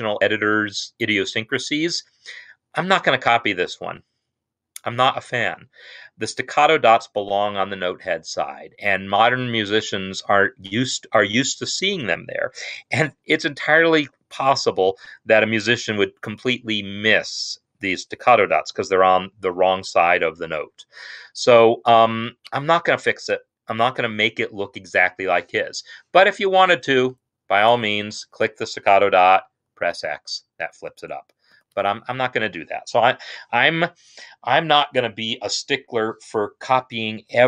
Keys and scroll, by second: 29.8 x, 31.6 ctrl+z.